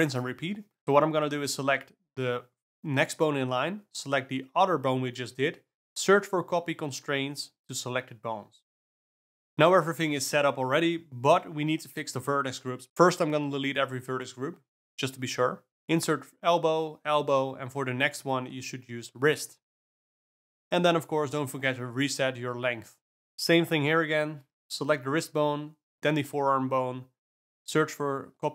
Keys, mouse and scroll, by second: 1.5 shift+click, 2.4 ctrl+shift+c, 3.8 F3, 8.4 alt+a, 8.6 click, 10.8 click, 12.1 click, 13.1 click, 14.3 click, 15.8-21.6 drag, 22.6 click, 23.3 ctrl+middle click, 26.8 click, 27.4 click, 28.1 shift+click.